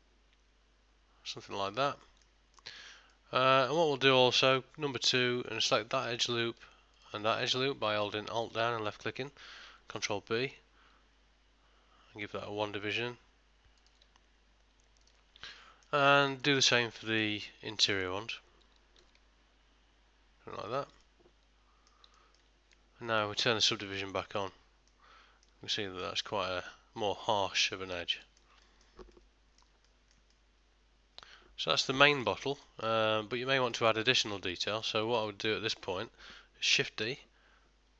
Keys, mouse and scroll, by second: 0.0 middle click, 2.6 ctrl+middle click, 3.2 middle click, 4.8 2, 5.5 alt+click, 6.0 middle click, 7.0 alt+shift+click, 7.5 middle click, 8.5 middle click, 10.0 ctrl+b, 14.4 scroll up 1, 15.0 scroll up 1, 15.1 alt+click, 15.6 middle click, 16.4 alt+click, 16.8 middle click, 17.9 alt+shift+click, 19.1 ctrl+b, 21.1 middle click, 22.2 ctrl+middle click, 22.7 Tab, 23.1 middle click, 24.5 click, 25.0 middle click, 25.9 ctrl+middle click, 26.3 middle click, 28.3 ctrl+middle click, 28.7 shift+middle click, 29.2 middle click, 29.9 shift+middle click, 30.4 middle click, 32.2 ctrl+middle click, 32.5 shift+middle click, 32.9 middle click, 34.2 ctrl+middle click, 34.7 shift+middle click, 35.3 middle click, 37.2 shift+d.